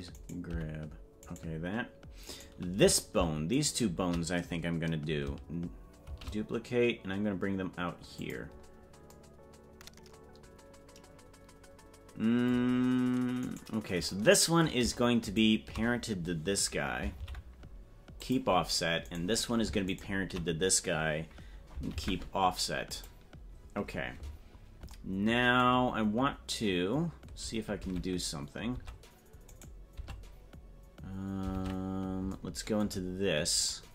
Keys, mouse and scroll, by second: 0.3 right click, 0.6 g, 2.4 right click, 3.7 shift+right click, 6.1 shift+d, 13.5 right click, 15.3 shift+right click, 17.1 ctrl+p, 19.2 right click, 20.0 shift+right click, 21.9 ctrl+p, 27.8 ctrl+Tab, 30.5 Tab, 33.4 scroll down 1.